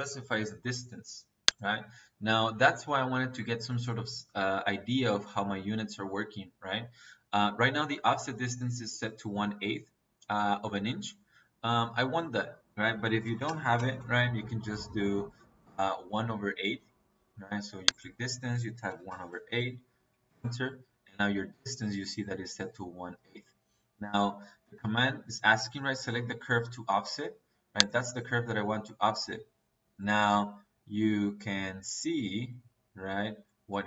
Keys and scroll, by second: 13.1 KP_1, 13.4 KP_Divide, 13.9 Return, 18.7 KP_1, 19.1 KP_Divide, 19.3 KP_8, 20.2 Return.